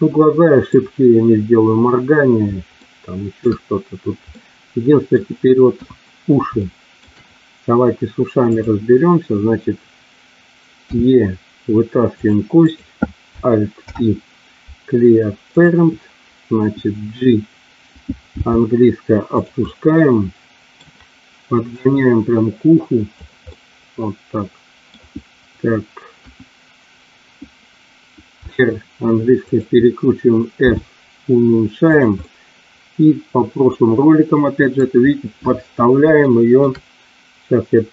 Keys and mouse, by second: 2.7 shift+middle click, 4.2 middle click, 5.7 KP_1, 6.6 shift+middle click, 8.6 click, 10.9 e, 12.6 click, 13.9 alt+p, 18.3 g, 19.3 click, 19.5-20.8 middle drag, 21.9-23.1 drag, 23.4-24.8 middle drag, 26.1 KP_1, 28.3 r, 29.4 click, 30.6 s, 31.8 click, 32.2-34.7 middle drag, 36.2 shift+middle click.